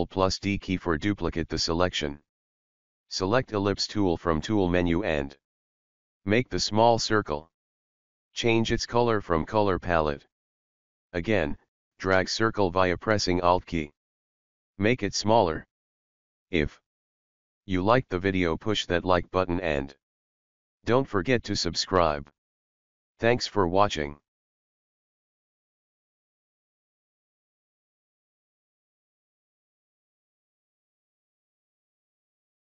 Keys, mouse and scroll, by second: 2.2 click, 5.0 right click, 5.8-17.2 drag, 17.2-19.6 alt+shift+drag.